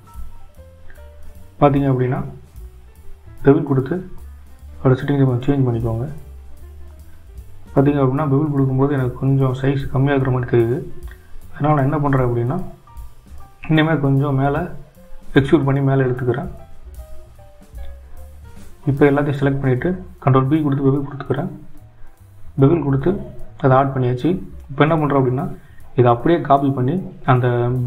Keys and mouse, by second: 8.5 click, 10.3 shift+z, 12.0 click, 14.2 e, 18.2 click, 19.6 a, 21.8 click, 23.5 ctrl+b.